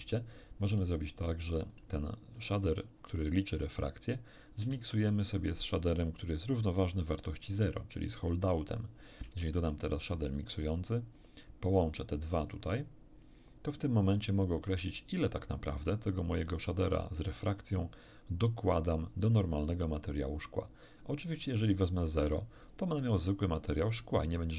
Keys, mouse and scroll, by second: 0.8-1.6 drag, 1.8 middle click, 2.9-4.6 drag, 4.7 shift+a, 6.8 click, 8.0 click, 9.4 shift+a, 10.4 shift+click, 11.7 click, 12.4-13.4 drag, 14.1-15.6 drag, 16.2 click, 21.0 click.